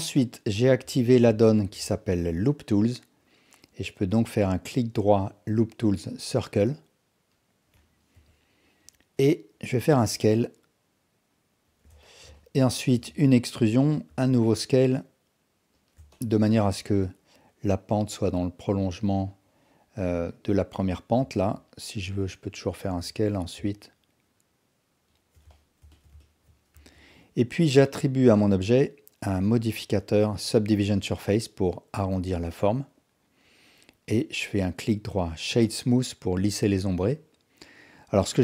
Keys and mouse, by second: 1.0 alt+click, 1.5 ctrl+alt+click, 1.9 alt+shift+click, 4.7-7.3 drag, 8.1 KP_1, 9.0 click, 9.8 s, 12.1 alt+shift+click, 12.4 ctrl+alt+click, 13.0 e, 14.1 s, 16.1 alt+shift+click, 21.2 2, 22.8 s, 25.6 alt+drag, 25.9 alt+shift+drag, 26.2 ctrl+alt+click, 26.7 Tab, 28.0-32.4 drag.